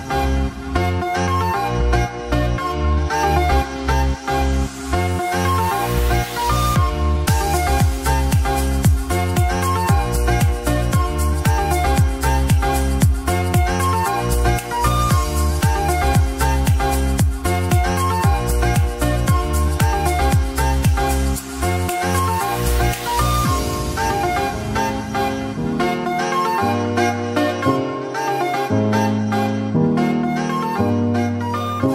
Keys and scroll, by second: 1.4 ], 4.1 [, 5.1-6.9 typing, 16.2 space, 21.7 space, 22.0 ], 22.2 [, 22.6 [, 24.7 ], 26.0 [, 26.9 [.